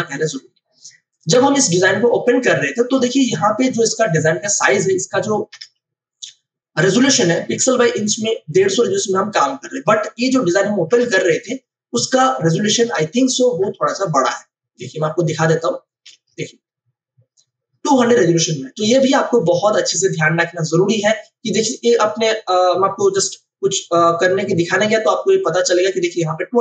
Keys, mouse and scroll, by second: 1.8 space, 2.2 click, 2.3 space, 5.5 ctrl+alt+i, 8.5 click, 11.2 ctrl+o, 12.7 click, 16.4 ctrl+alt+i.